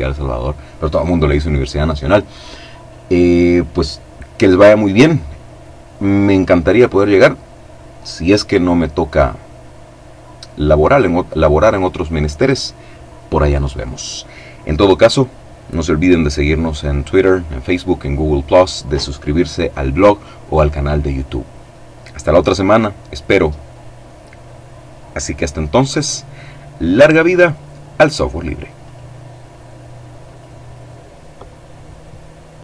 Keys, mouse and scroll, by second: 27.9 click, 29.3-32.6 drag.